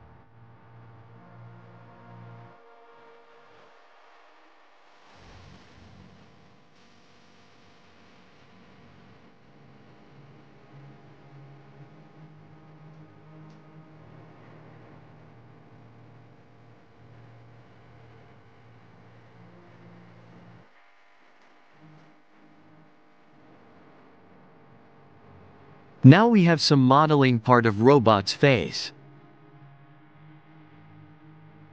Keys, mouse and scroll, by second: 0.3 click, 0.7 shift+click, 1.3 shift+d, 3.1 r, 6.0-6.5 scroll down 3, 6.5-7.2 shift+middle drag, 7.2 click, 9.2-9.6 scroll up 4, 9.6-10.3 shift+middle drag, 10.3 click, 11.0 click, 12.4 r, 14.8 click, 15.5 r, 17.7 click, 18.6 click, 20.6 click, 21.0 click, 21.7 click, 22.0 click, 22.6 alt+z, 22.9-23.6 scroll down 3, 23.6-24.0 shift+middle drag, 24.0-24.6 scroll up 1, 24.6-25.6 middle drag, 26.0-26.9 scroll up 1, 27.0 scroll up 3, 27.5-28.0 scroll down 4, 28.0-28.8 middle drag, 28.8 click, 29.5-30.4 scroll up 2, 30.4 KP_1.